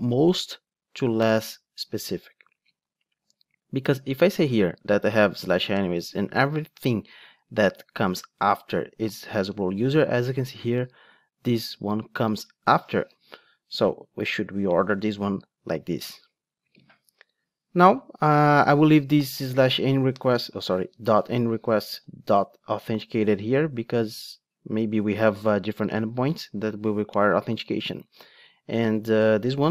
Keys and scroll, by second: 14.9 alt+shift+Up.